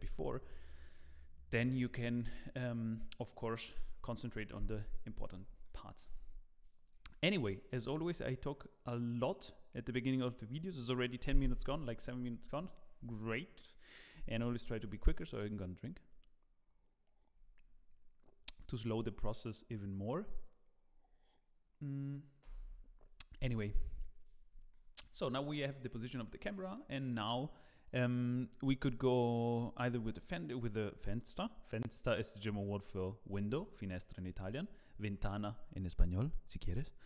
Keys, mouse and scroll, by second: 5.2 scroll up 2, 5.6 shift+middle click, 12.2 scroll down 1, 24.7 shift+middle click.